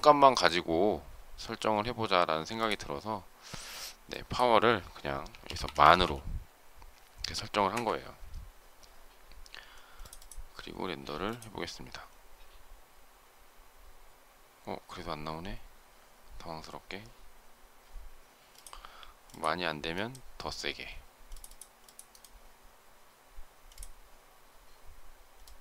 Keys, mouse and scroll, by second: 7.6 Return.